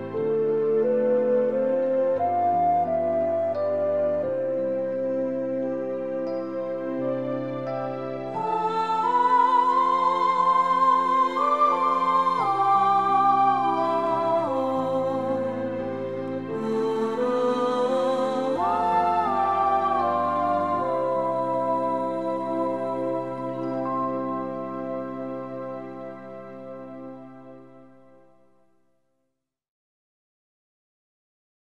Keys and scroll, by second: 2.0 -, 5.4 KP_Subtract.